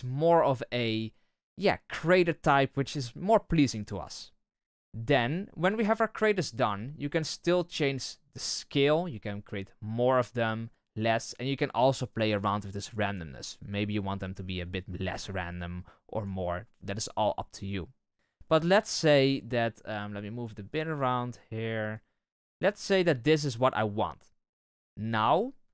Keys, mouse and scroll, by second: 5.4-6.1 scroll down 1, 6.1-7.0 scroll up 1, 7.0-8.4 scroll up 1, 8.4-11.0 drag, 12.7-15.4 drag, 19.8-25.7 drag.